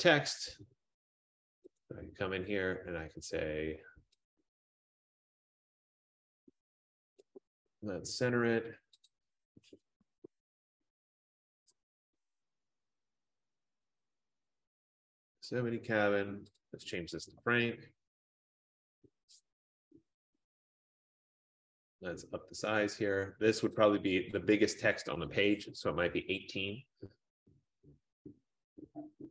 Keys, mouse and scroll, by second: 1.9 click, 2.4 scroll down 1, 7.3 click, 9.1 click, 10.1-14.6 typing, 11.8 Caps_Lock, 12.4 click, 14.8 ctrl+a, 15.4 F15, 16.7 click, 17.1-18.2 typing, 20.8 click, 23.9 click, 25.2 click, 25.6-28.9 typing, 28.2 click.